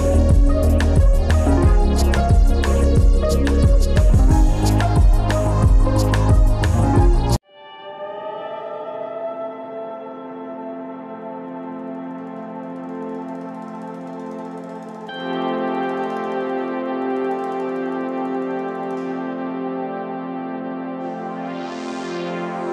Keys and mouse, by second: 0.6 Tab, 1.4 Tab, 1.4 click, 4.8-7.2 right drag, 7.2 Tab, 8.3-8.6 drag, 9.0 Tab, 12.0 ctrl+z, 12.2-13.6 ctrl+z, 17.0 Tab, 17.9 click, 18.7 click, 20.1 Tab, 21.6-22.6 right drag.